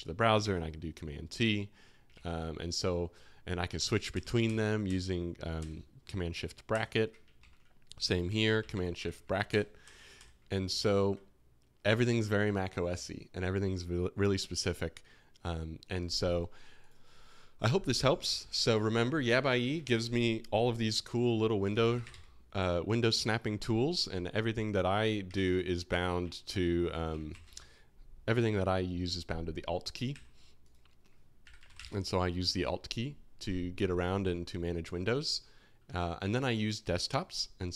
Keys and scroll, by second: 0.4 super+t, 2.1 alt+1, 3.7 shift+super+], 4.1 shift+super+], 7.3 alt+2, 8.4 shift+super+[, 8.5 shift+super+[, 9.4 shift+super+], 9.8 shift+super+], 10.8 alt+1, 19.8 super+n, 21.6-23.3 typing, 25.3 super+n, 27.3 alt+shift+l, 30.1 super+w, 31.3-32.2 typing, 36.2 typing.